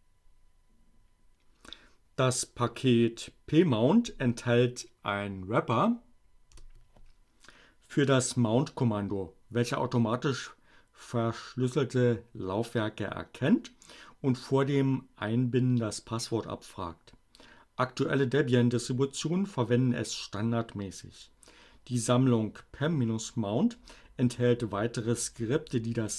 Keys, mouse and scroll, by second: 2.4 BackSpace.